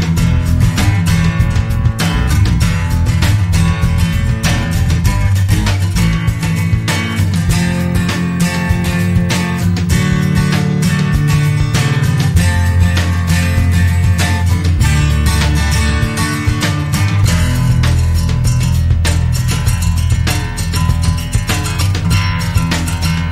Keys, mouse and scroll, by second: 1.1 click, 3.5 click, 4.0-4.5 scroll up 2, 4.7-5.3 scroll down 1, 5.6-6.0 scroll up 2, 6.5 scroll up 2, 7.7 click, 9.5 click, 10.7 click, 12.4-12.9 scroll down 2, 13.4-14.7 scroll up 6, 15.3 click, 16.6 click, 18.1 click, 19.6-20.1 scroll down 1, 21.4 click, 22.9 click.